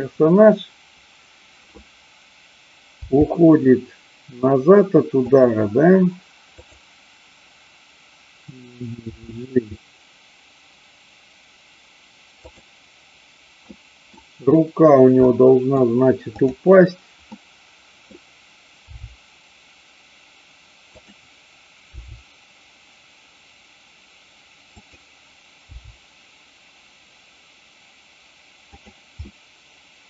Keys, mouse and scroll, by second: 3.0 g, 5.2 click, 6.5 click, 9.2 g, 12.4 click, 13.6-14.2 middle drag, 15.3 middle click, 16.4-17.4 drag, 17.4-18.0 middle drag, 18.9 g, 20.9 click, 21.9 r, 24.8 click, 25.6 g, 28.8 click, 29.3-30.0 middle drag.